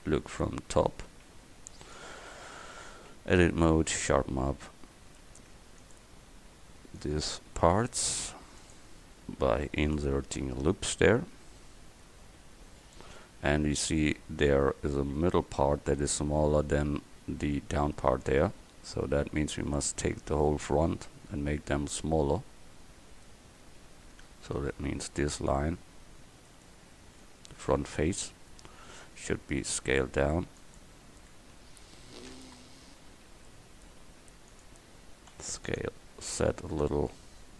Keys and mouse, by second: 0.5 KP_7, 2.8 Tab, 5.2 ctrl+r, 7.7 ctrl+r, 10.3 Tab, 12.6 middle click, 18.5 Tab, 19.0-20.9 middle drag, 27.3 middle click, 27.7 middle click, 28.4 middle click, 29.2 s, 31.6 KP_1, 33.3 s, 35.4 s.